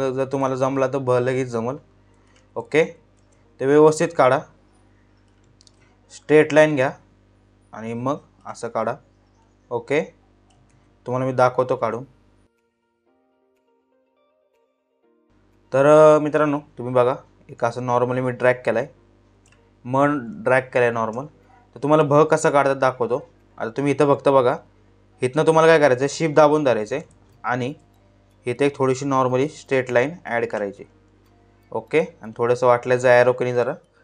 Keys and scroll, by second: 0.1 ctrl+z, 2.7 ctrl+z, 5.1 ctrl+z, 8.1 ctrl+z, 10.2 ctrl+z, 13.1 ctrl+z, 19.8 space, 27.1 ctrl+z, 33.6 Left.